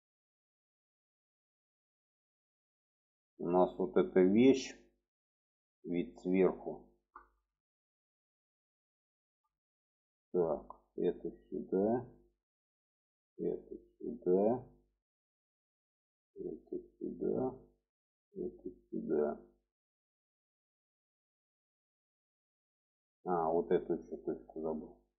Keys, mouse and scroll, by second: 1.9 middle click, 2.9-3.9 middle drag, 4.2-5.3 alt+middle drag, 5.8 alt+middle click, 7.0 shift+middle click, 7.9 shift+middle click, 8.9 shift+middle click, 10.3 click, 11.0 click, 12.6 click, 13.1-14.7 drag, 15.4 click, 16.0 click, 17.5 click, 18.1-19.6 drag, 21.0 middle click, 22.0 middle click, 23.6 click, 23.9 alt+middle click.